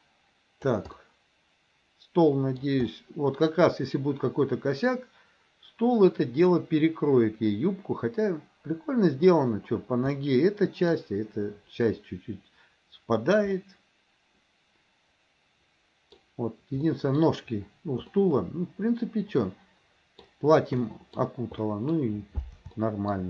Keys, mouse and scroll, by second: 1.0 scroll up 1, 1.1-2.6 middle drag, 2.6 scroll down 1, 2.9 scroll up 1, 3.0-9.3 middle drag, 10.2-11.0 middle drag, 11.0-12.7 scroll down 1, 12.7-13.6 scroll down 1, 13.6-16.2 middle drag, 16.2-16.9 scroll down 1, 16.9 scroll up 1, 17.0 middle click, 18.1 scroll up 1, 18.3-20.3 middle drag, 20.9 middle click, 21.6 scroll up 1, 21.7 middle drag, 22.0-22.6 scroll down 1, 22.9 shift+middle drag, 23.1 scroll down 1.